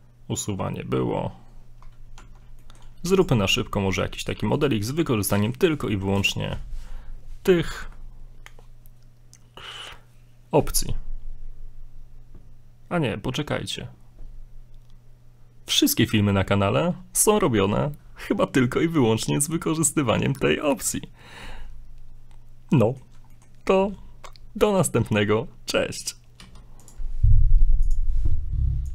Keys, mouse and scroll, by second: 2.1 Tab, 2.6 middle click, 3.0 middle click, 3.2 x, 4.1 shift+middle click, 4.5 shift+middle click, 4.6 right click, 5.2 middle click, 22.8 middle click, 23.3 shift+middle click, 26.4 x.